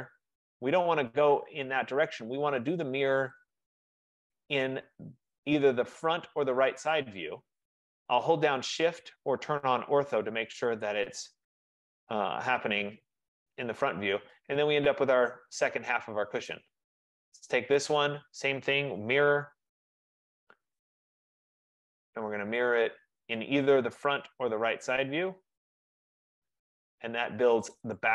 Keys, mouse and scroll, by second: 0.4 click, 3.5 click, 4.3 click, 10.9 shift+click, 16.6 right click, 17.5 click, 19.1-19.8 typing, 19.9 Return, 22.0 click, 22.5-23.2 typing, 25.8 shift+click, 27.8 click.